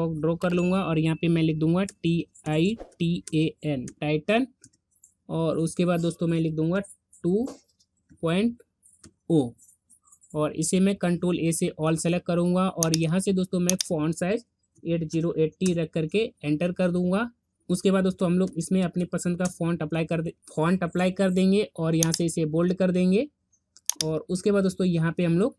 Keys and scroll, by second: 10.7 ctrl+a.